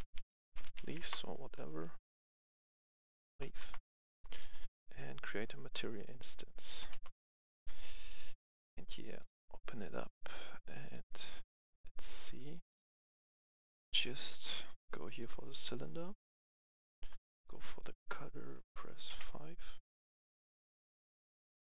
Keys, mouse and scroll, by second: 0.0-0.9 typing, 1.0 Return, 2.3 click, 2.5 F2, 3.0 Right, 3.3 BackSpace, 3.6 Return, 4.3 right click, 5.2 click, 6.9 Return, 9.1 click, 13.0 F10, 13.7 click, 13.7 F10, 15.0 click, 18.7 BackSpace, 19.1 KP_5, 20.3 click.